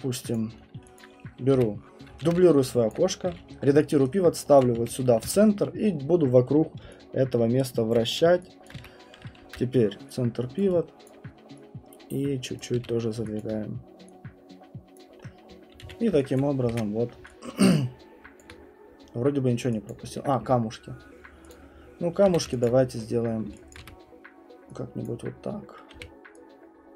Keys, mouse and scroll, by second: 0.3 middle click, 0.3 click, 0.5 middle click, 0.6 middle click, 1.0 alt+click, 1.6 w, 2.2 ctrl+d, 2.4 middle click, 2.6 middle click, 2.6 middle click, 2.9 alt+click, 3.1-5.3 typing, 4.6 click, 6.8-8.0 j, 8.0 click, 8.6 alt+click, 8.8 w, 9.4 ctrl+c, 10.6 click, 11.0 alt+click, 12.6 click, 12.8 f, 13.4 alt+click, 15.0 click, 15.2-15.6 scroll, 15.8 q, 16.4 click, 16.7 ctrl+1, 17.0 scroll, 18.4 click, 18.6 scroll, 19.9 alt+click, 21.5 click, 22.3 f, 22.6 alt+click, 22.8-23.5 scroll, 23.8 middle click, 23.8 w, 25.0 click, 25.9 r.